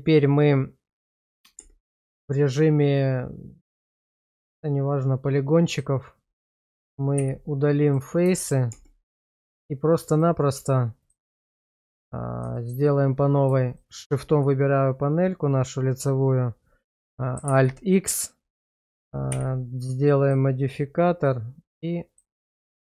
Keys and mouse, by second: 1.6 Tab, 4.7-5.9 drag, 7.2 x, 8.4 shift+middle click, 8.7 Tab, 9.3 shift+middle click, 12.6 shift+middle click, 13.7 click, 17.5 alt+x.